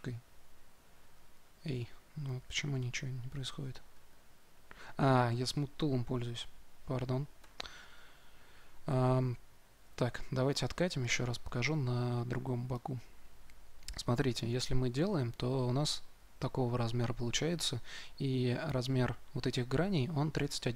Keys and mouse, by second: 4.0-7.3 middle drag, 7.3 2, 7.8-10.2 drag, 13.8-20.7 drag.